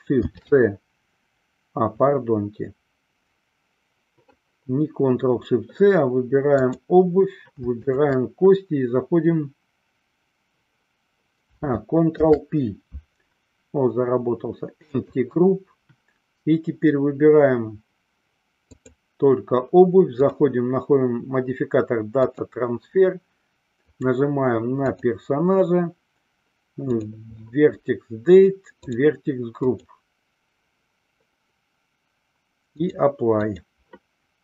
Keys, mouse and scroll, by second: 0.4 ctrl+shift+c, 6.6 click, 8.0 shift+click, 12.3 ctrl+p, 18.8 click, 20.3-22.7 drag, 23.9 click, 29.0 click, 33.0-34.3 drag.